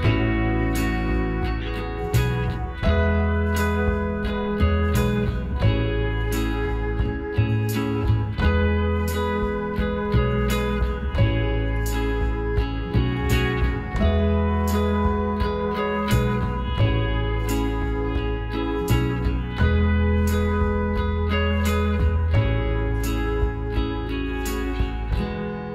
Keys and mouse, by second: 2.7 ctrl+r, 5.8-7.4 drag, 6.8-9.1 right drag, 8.4 f, 9.4-15.7 right drag, 10.8 f, 11.1-13.0 drag, 15.2 f, 16.2-18.4 right drag, 17.6 f, 19.6-22.2 middle drag, 22.2-24.8 right drag, 24.0 f, 24.8 a.